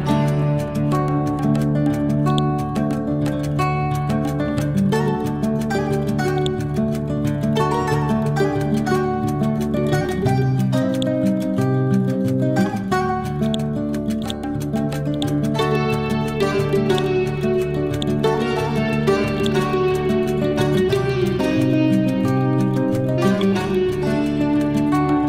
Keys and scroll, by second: 0.3 ctrl+z, 12.8 ctrl+k, 16.3 Delete, 21.9 F12, 23.3 2, 23.5 Return.